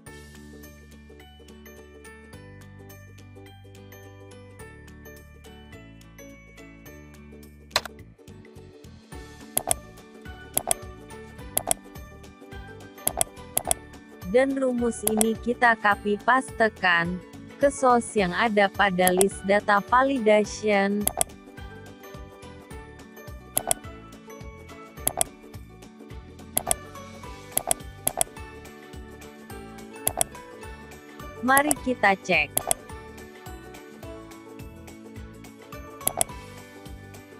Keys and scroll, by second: 15.5 ctrl+x, 27.5 ctrl+v.